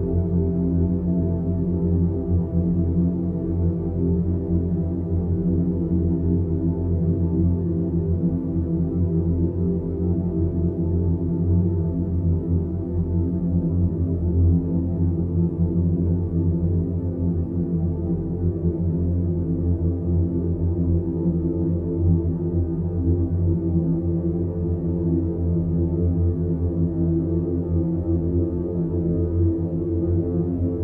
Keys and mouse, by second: 1.2 click, 2.7 ctrl+i, 4.5 h, 5.1 click, 7.8-8.6 middle drag, 11.0 alt+g, 12.9-13.2 drag, 14.6-15.8 drag, 16.2 shift+a, 20.2 click, 21.4-22.0 middle drag, 23.1 click, 24.9-25.7 middle drag, 26.1 Tab, 27.3 ctrl+r, 29.8 2, 30.2 drag, 30.7 alt+shift+click.